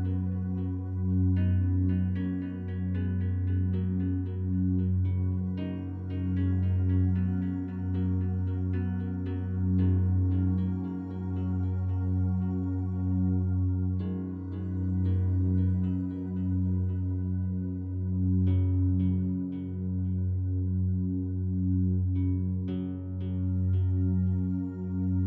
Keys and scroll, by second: 5.8 ctrl+t.